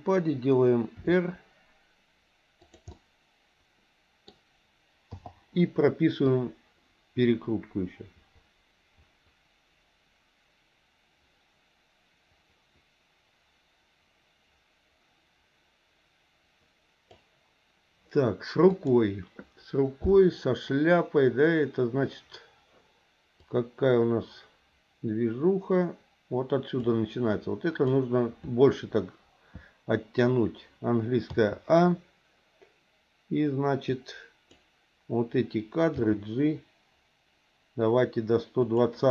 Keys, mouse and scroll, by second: 1.0 r, 2.9-4.2 middle drag, 5.1 i, 6.3-17.2 drag, 18.7 click, 23.4-26.9 drag, 27.3 click, 31.3 a, 33.9 click, 35.9 g.